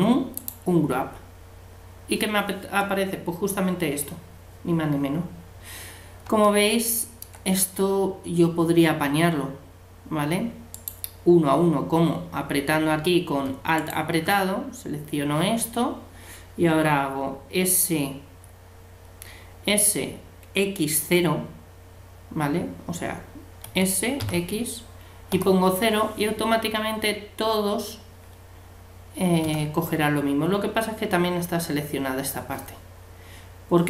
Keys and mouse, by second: 5.7-10.7 middle drag, 10.7-12.5 right drag, 13.8-15.6 right drag, 23.7 s.